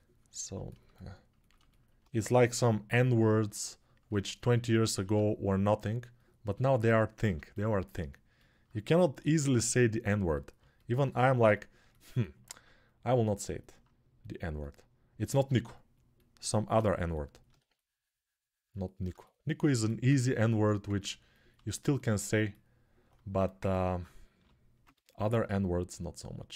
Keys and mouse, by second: 1.9 1, 4.0 click, 4.8 1, 7.4-21.6 alt+drag, 9.0 g, 17.4 3, 21.6-22.9 alt+right drag, 22.9 click, 23.0 alt+right click, 23.2-26.5 ctrl+alt+drag, 24.1 g.